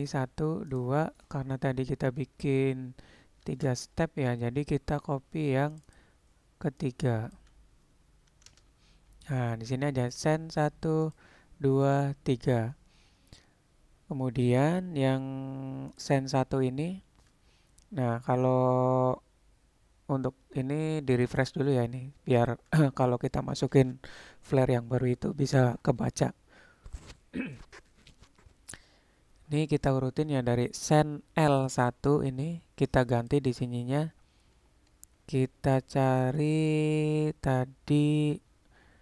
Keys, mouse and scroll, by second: 0.1 click, 3.5 shift+d, 5.9-9.5 drag, 10.2 click, 11.1 click, 11.9 click, 15.9 click, 21.3 click, 33.4-39.0 drag.